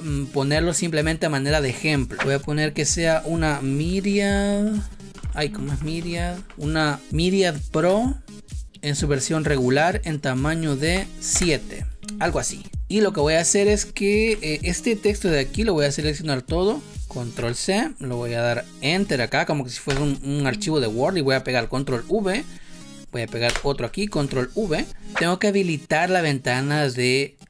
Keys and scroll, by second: 3.6-5.2 typing, 10.8 7, 11.2 Return, 14.2 Left, 17.4 ctrl+c, 19.8 Return, 21.5 ctrl+v, 23.4 Return, 24.0 ctrl+v.